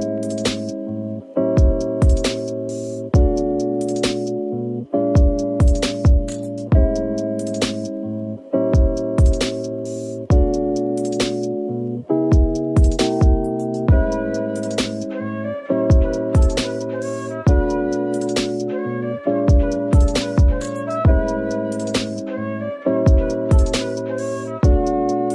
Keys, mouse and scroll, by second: 15.4 a, 18.7 scroll down 1, 18.9-19.6 typing, 21.4 typing, 22.7-23.5 typing.